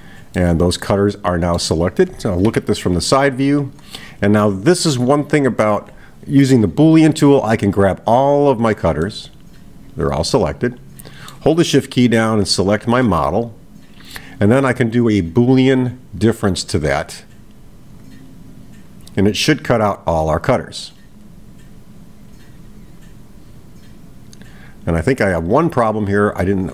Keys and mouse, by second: 0.4-1.8 middle drag, 3.6 click, 7.2-8.6 drag, 9.0-11.5 middle drag, 17.5-26.7 drag.